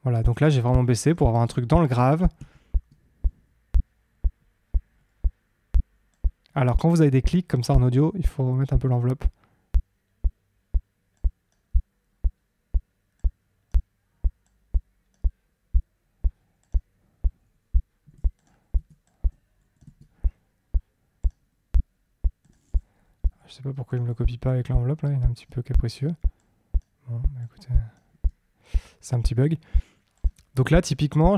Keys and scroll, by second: 1.4 super+d, 19.8 super+d.